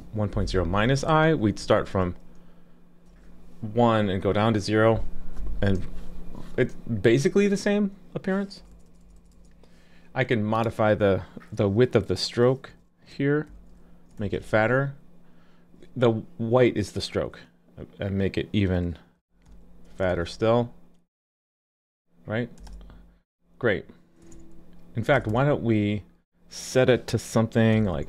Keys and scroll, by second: 1.6 super+s, 14.2 super+s, 20.1 super+s.